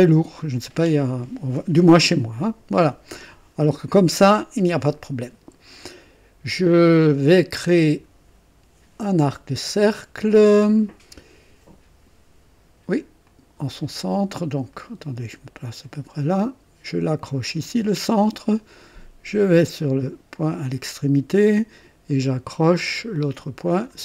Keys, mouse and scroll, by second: 13.2 click, 14.7 right click, 15.6 right click, 17.6 click, 20.5 click, 23.7 click.